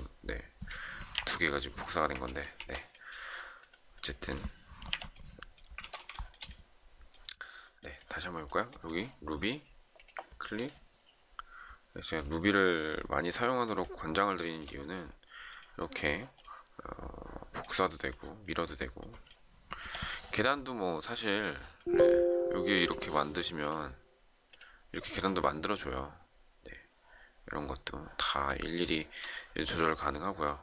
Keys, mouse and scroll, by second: 1.1 Delete, 2.3 ctrl+z, 4.8 Delete, 5.7 ctrl+z, 6.1 shift+middle click, 14.3 shift+middle click, 19.8 Delete, 28.9 shift+middle click, 29.1 shift+double middle click.